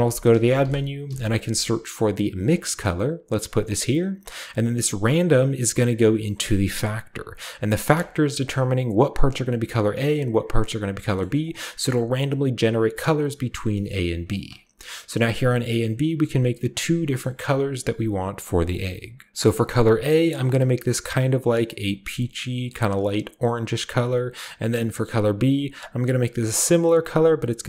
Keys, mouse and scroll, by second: 0.0-1.0 typing, 2.4 click, 3.5 click, 3.9 click, 5.4-7.9 drag, 8.1-9.8 scroll up 1, 10.5 drag, 10.8-11.2 scroll down 1, 11.2 scroll up 1, 11.4 click, 14.3 click, 16.5-17.1 scroll up 1, 17.1-18.7 scroll up 1, 17.2-18.7 middle drag, 18.7 click, 19.3 ctrl+c, 19.3 click, 20.6-21.7 drag, 21.8 click, 22.6 click, 23.3-24.7 drag, 24.5-25.1 scroll down 1, 25.1-26.4 drag, 27.1-27.6 drag.